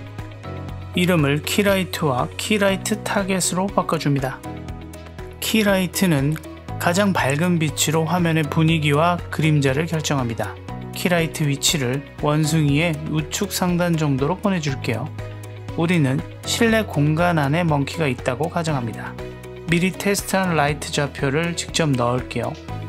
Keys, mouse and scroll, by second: 0.2 click, 0.4-1.7 drag, 3.1-4.4 drag, 5.8 click, 6.6-8.2 middle drag, 8.4 g, 11.3 click, 11.7 middle drag, 12.4 click, 12.7-13.5 middle drag, 14.9-15.4 middle drag, 17.7 middle click, 20.3 click, 21.3 click, 22.7 click.